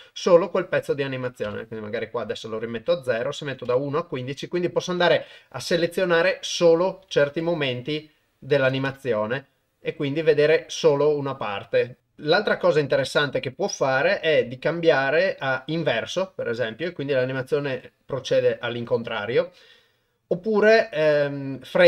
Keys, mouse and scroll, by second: 1.2 click, 3.1 click, 6.8 click, 7.8-8.9 drag, 12.4 click, 14.1-15.8 drag, 19.8-21.8 drag.